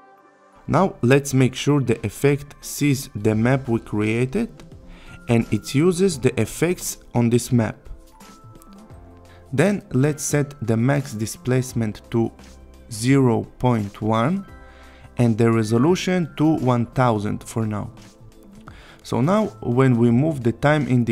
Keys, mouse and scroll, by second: 2.9 click, 6.3 click, 11.6 click, 16.3 click, 19.2 Return, 19.9-21.1 click.